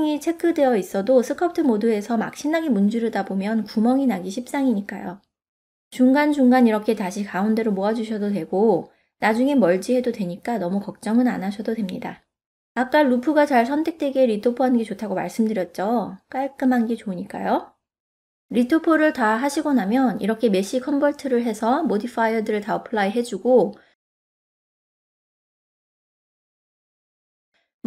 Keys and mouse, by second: 0.2 click, 1.1 click, 1.5 click, 2.5 middle click, 3.0 ctrl+middle click, 3.7 middle click, 4.6 ctrl+middle click, 5.2 shift+middle click, 5.5 middle click, 6.6 2, 7.5 3, 10.3-12.0 middle drag, 15.7 middle click, 16.8 click, 18.1-19.2 middle drag, 20.2 Tab, 21.6 q, 24.1 n, 27.3 click.